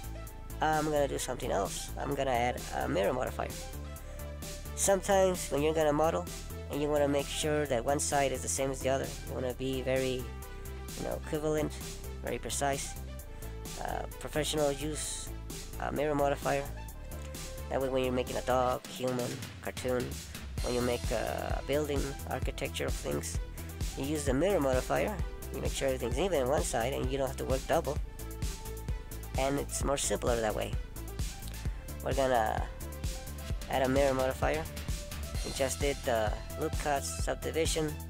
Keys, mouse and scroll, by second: 0.3 ctrl+z, 1.7 middle click, 4.6 ctrl+z, 5.0 ctrl+z, 6.5 ctrl+z, 6.7 middle click, 9.3 middle click, 12.7 a, 13.2 a, 13.9 right click, 16.1 middle click, 26.9 middle click, 29.5 middle click, 31.6 middle click, 34.5 middle click, 37.3 click.